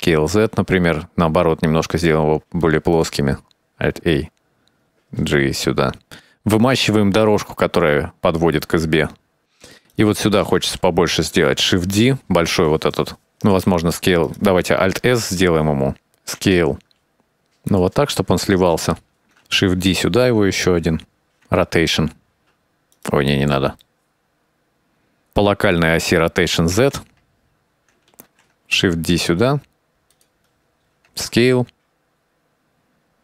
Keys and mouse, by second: 0.7 right drag, 1.4 s, 3.8 alt+a, 5.6 g, 7.3 alt+a, 7.9-11.2 drag, 12.2 shift+d, 13.8 s, 14.5 s, 15.7 alt+s, 16.3 s, 18.9 shift+middle click, 19.6 shift+d, 20.7 s, 22.0 r, 23.5-24.1 middle drag, 25.2-26.4 drag, 26.7 r, 28.9 shift+d, 31.5 s, 31.9-32.7 shift+drag, 33.0 g.